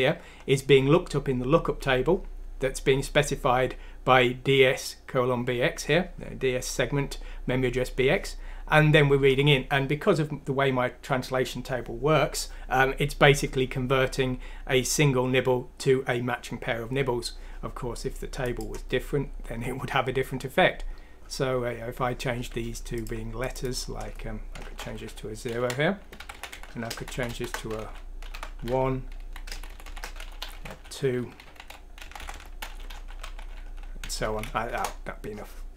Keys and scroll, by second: 24.9 typing, 26.2-29.2 typing, 30.2-31.2 typing, 32.0 Delete, 32.2 Delete, 32.3 Delete, 32.6-34.0 typing, 34.6 F6, 34.8 Return.